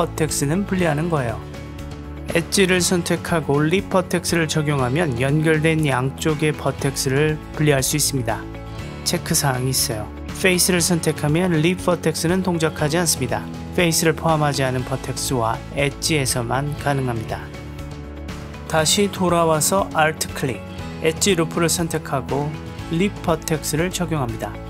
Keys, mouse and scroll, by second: 0.4 ctrl+z, 3.0 v, 5.0 click, 8.2 g, 9.6-10.6 drag, 11.1-12.0 middle drag, 18.0-19.7 drag, 21.5-24.6 drag.